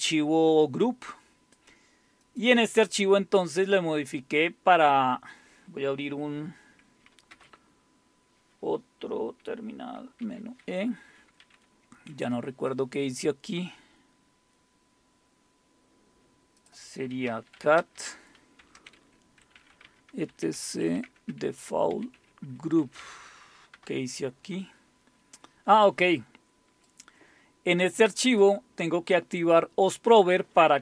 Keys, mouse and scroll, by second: 1.6 click, 1.6 typing, 2.4 click, 7.3 super+Return, 10.2 super+e, 13.8-15.6 scroll down 1, 16.6 click, 16.9-23.7 typing, 26.4 typing, 26.9-29.1 drag.